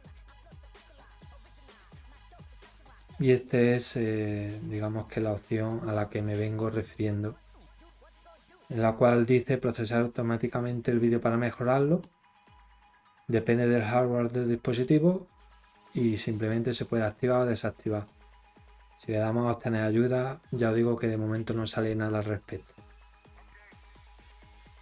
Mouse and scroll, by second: 2.9 click, 15.9 click, 16.7 click, 17.1 click, 18.0-18.8 scroll, 20.1 scroll.